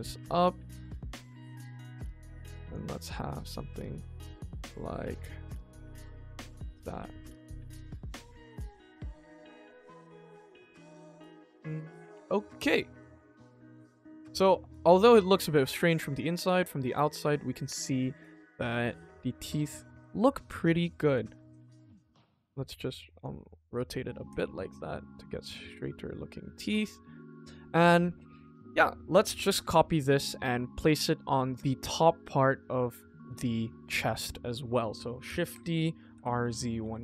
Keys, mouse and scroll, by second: 1.2 r, 2.8 click, 3.0 middle click, 4.0 middle click, 4.4 click, 4.7 middle click, 5.0 r, 6.8 g, 7.7 click, 7.9 middle click, 8.3 KP_1, 8.8 scroll down 2, 9.0 scroll up 1, 9.3 click, 11.2 scroll down 2, 11.4-13.8 middle drag, 14.0 click, 14.2 ctrl+s, 14.6 middle drag, 14.9 scroll up 2, 15.2 middle click, 15.9 scroll down 2, 16.1 middle click, 16.6 middle click, 17.2 click, 18.3 g, 20.1-20.4 scroll up 2, 20.5 shift+middle click, 21.1 r, 23.3 click, 23.7 middle click, 24.2 ctrl+s, 24.5 shift+middle click, 25.0 click, 25.4 r, 26.2 click, 26.6 ctrl+s, 27.0 middle click, 27.7 shift+middle click, 28.2 middle click, 29.4 click, 29.8-30.2 middle drag, 32.4 middle drag, 32.9 middle click, 33.7 middle click, 34.2 middle click, 35.2 shift+d, 36.1 r.